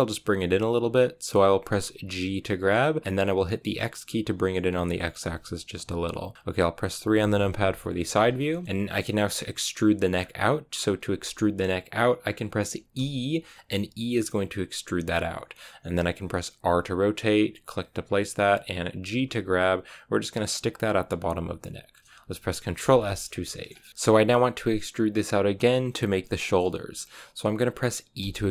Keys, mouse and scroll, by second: 1.9 g, 7.0 KP_3, 8.0 scroll down 2, 8.3-10.0 shift+middle drag, 10.0-12.1 scroll up 1, 12.1-12.9 scroll down 1, 12.9 e, 16.5 r, 19.0 g, 21.3 g, 23.1 shift+middle click, 23.9-25.0 scroll up 1, 25.0-28.1 scroll up 1, 28.1 e.